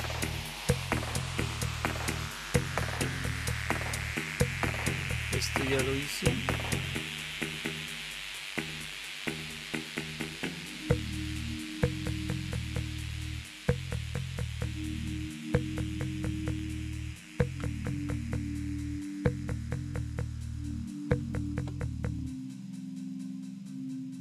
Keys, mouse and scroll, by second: 17.3 Down, 17.6 Down, 17.8 Down.